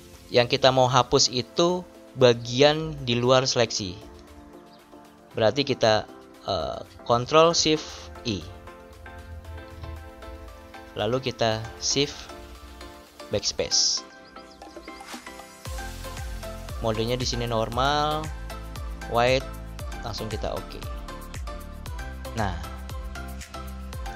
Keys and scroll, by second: 13.1 shift+BackSpace.